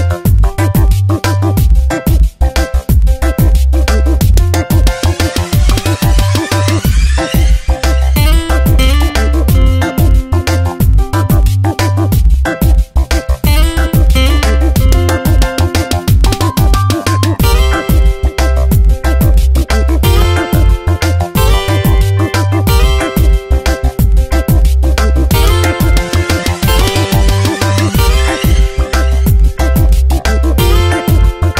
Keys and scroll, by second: 4.4 ctrl+z, 10.6 s, 21.4 space, 23.5 space, 23.8 v, 24.9 ctrl+z, 28.9 ctrl+x, 30.6 b, 31.1 c.